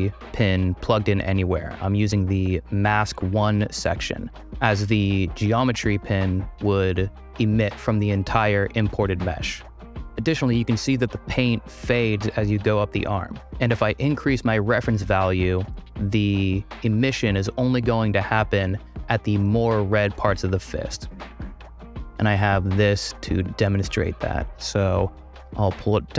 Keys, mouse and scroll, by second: 21.8 click, 22.4 click, 23.0 click, 24.3-25.3 drag, 25.4 space.